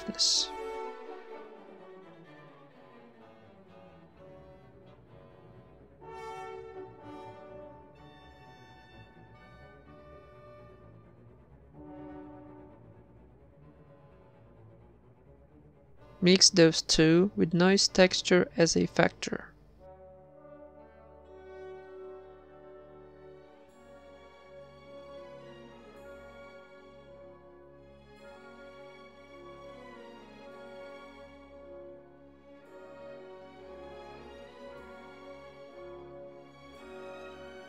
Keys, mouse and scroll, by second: 0.0 ctrl+s, 0.0 shift+d, 1.4 shift+b, 13.8 shift+d, 17.4 shift+a, 30.3 shift+a, 35.8 a, 35.9 b, 35.9 g, 37.2 ctrl+s.